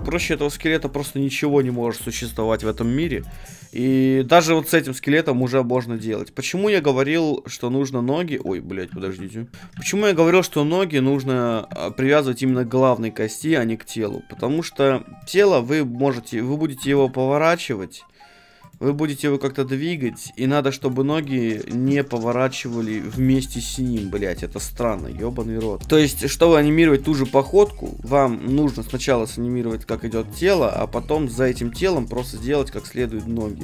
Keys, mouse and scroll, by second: 0.9-6.6 middle drag, 6.6-9.6 right drag, 6.7 g, 9.0 ctrl+Tab, 9.5 ctrl+Tab, 9.5 shift+p, 9.7 a, 9.9-14.4 right drag, 10.1 g, 13.6 a, 14.4-17.2 middle drag, 16.8 r, 18.7-24.8 right drag, 18.8 g, 20.2-23.3 middle drag, 23.1 r, 25.8-28.7 middle drag, 25.8 a, 28.7-30.7 drag, 31.0 ctrl+z, 31.2-33.6 right drag, 31.8 r.